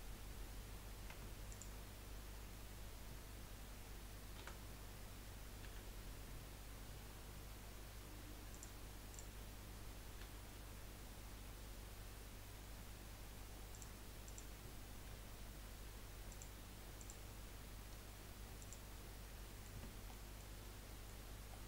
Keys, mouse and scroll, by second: 1.1 Tab, 1.5 click, 4.4 a, 5.6 g, 9.1 click, 10.2 g, 14.2 click, 15.1 g, 17.0 click, 17.3 g, 19.1-19.5 scroll down 2, 19.5 middle click, 19.8 Tab, 20.1 middle click, 20.5-20.9 scroll up 2, 20.9-21.5 middle drag, 21.5-21.6 scroll down 1.